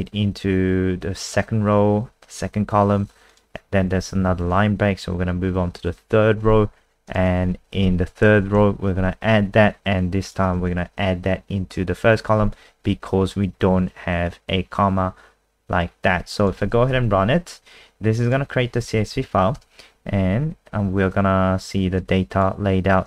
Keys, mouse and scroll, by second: 4.0 Left, 4.2 shift+Right, 4.3 shift+Right, 7.1 click, 7.7 Left, 7.8 Left, 8.0 Left, 8.4 Left, 8.4 Right, 16.4 click, 16.6 ctrl+s, 16.9 F5, 18.2 click, 19.0 End, 19.1 Home, 19.6 Return, 22.0 click.